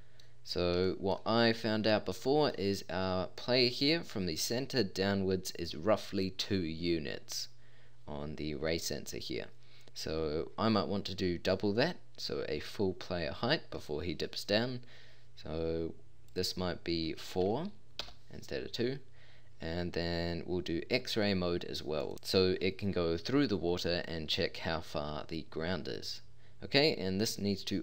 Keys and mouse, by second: 4.8-5.3 middle drag.